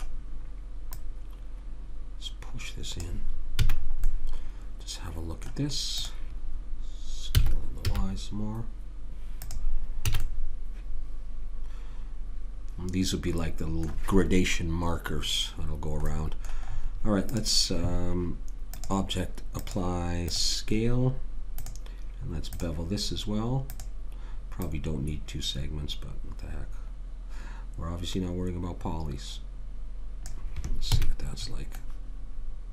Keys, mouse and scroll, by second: 0.9 click, 3.6 a, 3.8-6.0 middle drag, 6.0 click, 7.3 s, 10.1 a, 10.2 middle click, 16.1-17.3 middle drag, 17.3 click, 20.4-23.4 drag, 23.7 click, 31.0 a, 31.4 middle click.